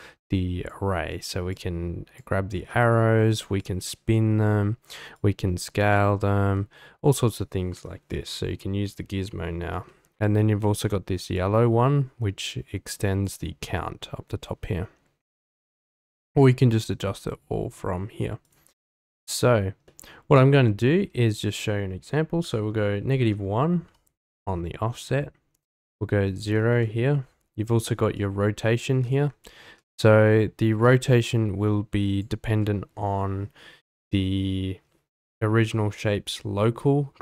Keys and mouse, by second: 1.5-2.2 drag, 2.7 middle drag, 3.6-4.2 drag, 5.1-5.8 drag, 6.6 ctrl+z, 7.2 ctrl+z, 7.8 ctrl+z, 11.4-13.3 drag, 18.4 click, 19.8-20.3 middle drag, 21.4-23.9 drag, 25.8 click, 28.1-29.1 drag, 29.6 ctrl+z, 31.0-32.3 drag.